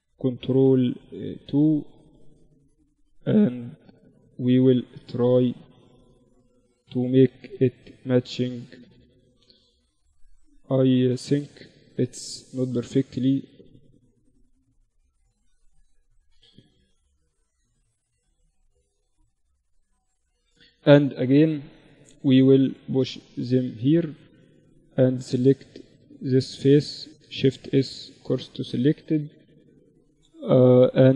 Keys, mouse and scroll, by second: 0.6 Tab, 1.5 ctrl+r, 3.9 ctrl+r, 5.5 ctrl+r, 7.0 Tab, 10.6 Tab, 11.3 z, 13.4 ctrl+r, 13.4 z, 14.6 Tab, 19.3 KP_1, 20.4 KP_3, 21.7-23.2 drag, 22.8 Tab, 23.2 Tab, 24.1 Tab, 26.3 shift+s, 27.2 Tab, 28.4 KP_3, 29.1 shift+a.